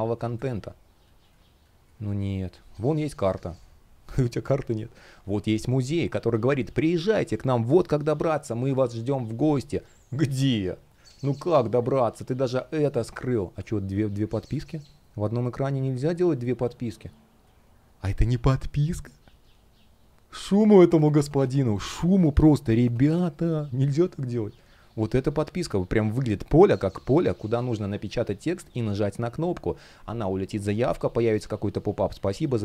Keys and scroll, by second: 0.0 space, 9.2 space, 14.2 space, 22.1 space.